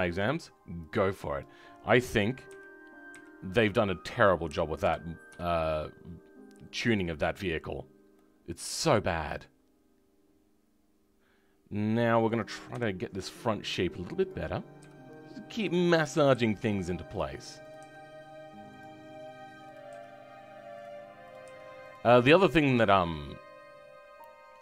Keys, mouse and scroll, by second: 1.3 click, 2.4 KP_3, 3.0 KP_1, 3.5-4.7 scroll up 3, 4.7 g, 7.4-8.1 scroll down 2, 8.1-10.3 middle drag, 12.7 KP_3, 13.0-14.2 scroll up 1, 14.2 click, 14.7 g, 17.6 click, 17.7 g, 19.7 click, 19.9 g, 21.3 click, 21.4 g, 22.0 scroll down 5, 22.3 middle click, 23.6 scroll up 2.